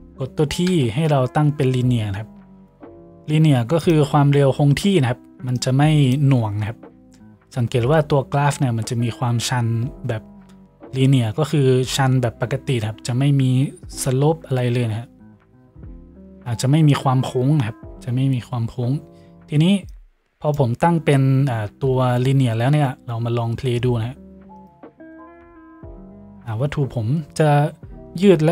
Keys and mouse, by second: 0.7 t, 21.7 t.